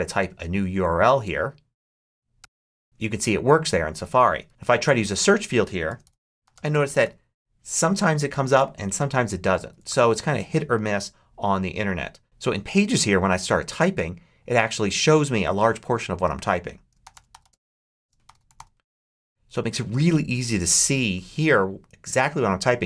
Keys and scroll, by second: 2.3 m, 4.3 super+a, 4.5 super+BackSpace, 5.5-7.2 typing, 9.5 super+a, 9.7 super+BackSpace, 10.7 BackSpace, 16.7-18.9 typing.